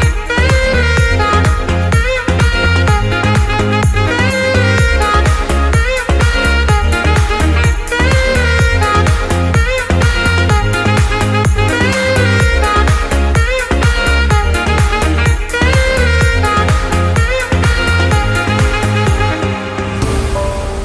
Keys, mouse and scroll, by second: 2.1 click, 2.4 g, 4.3 shift+click, 5.7 click, 6.7 click, 8.1 click, 8.5 click, 9.1-10.6 drag, 10.6 KP_Enter, 11.6 g, 16.2 shift+click, 16.8 alt+a, 17.2 ctrl+s, 20.3 click.